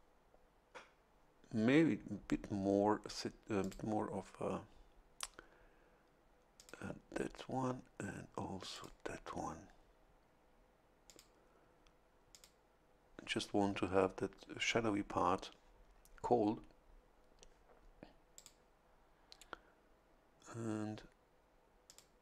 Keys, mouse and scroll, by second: 3.6 click, 6.5 click, 8.7 click, 11.1 click, 12.3 click, 18.3 click, 21.8 click.